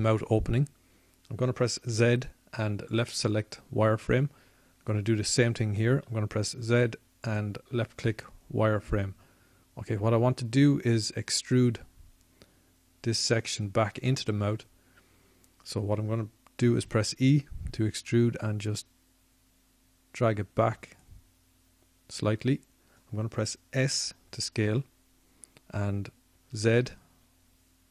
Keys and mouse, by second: 0.9-5.5 middle drag, 5.5 z, 6.7 z, 18.1-20.7 middle drag, 20.7 e.